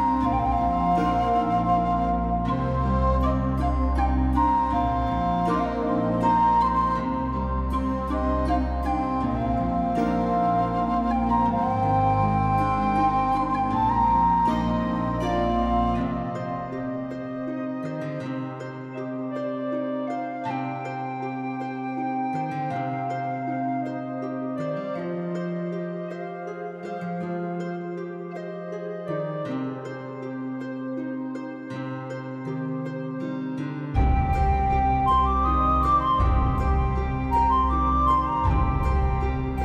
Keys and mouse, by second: 0.5 g, 0.6 g, 1.0 click, 1.2 alt+click, 1.3 alt+click, 1.4 alt+z, 1.8 g, 2.5 click, 2.7 click, 2.9-5.6 typing, 3.6 right click, 3.9 click, 4.1 click, 4.4 click, 4.9 click, 5.9 click, 6.1 middle click, 6.4 alt+z, 6.5 middle click, 6.8 shift+middle click, 7.0 middle click, 7.4 alt+middle click, 7.5 click, 8.3 g, 8.5 click, 8.7 click, 8.8 g, 9.1 click, 9.4 click, 9.8 g, 10.1 click, 10.4 g, 10.7 click, 11.1 g, 11.7 click, 12.4 alt+z, 12.8 click, 13.0 g, 13.4 click, 13.7 click, 13.9 g, 14.4 right click, 14.7 g, 15.3 click, 16.5 shift+middle click, 17.0 shift+middle click, 17.4 middle click, 17.8 shift+middle click, 18.1 click, 18.3 g, 18.7 click, 19.0 g, 19.5 click, 19.7 click, 19.8 g, 20.3 click, 20.7 alt+middle click, 20.8 alt+z, 21.0 shift+middle click, 21.4 middle click, 21.5 g, 22.0 middle click, 22.4 Tab, 22.6 middle click, 22.9 alt+middle click, 23.0 alt+middle click, 23.2 Tab, 24.0 shift+middle click, 24.6 g, 24.8 g, 25.2 right click, 25.3 middle click, 25.5 alt+middle click, 25.7 alt+middle click, 26.1 Tab, 26.6 alt+click, 26.8 alt+click, 26.9 alt+click, 27.1 shift+click, 27.8 shift+click, 28.5 middle click, 28.9 alt+middle click, 29.6 shift+middle click, 29.8 Tab, 30.0 shift+middle click, 30.5 alt+z, 30.9 alt+click, 31.1 alt+z, 31.2 g, 33.4 right click, 33.6 shift+middle click, 34.0 right click, 34.3 g, 35.0 right click, 35.2 g, 35.7 right click, 36.0 g, 37.6 click, 38.0 Tab, 38.2 shift+middle click, 38.9 shift+middle click, 39.5 click.